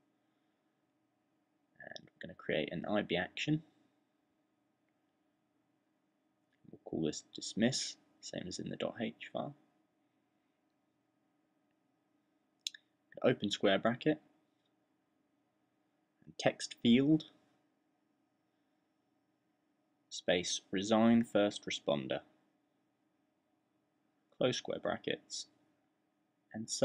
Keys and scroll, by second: 4.4 super+fn+-, 4.6-9.1 typing, 10.5 shift+], 12.1 w, 15.4 [, 17.1-18.6 typing, 20.0-26.4 typing.